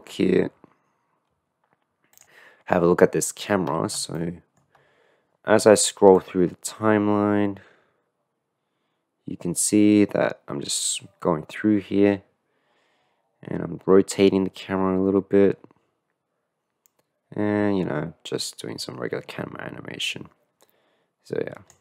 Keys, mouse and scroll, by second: 0.6-1.5 middle drag, 4.4 shift+middle click, 4.9 scroll up 1, 6.3-11.5 drag, 16.3-21.8 drag.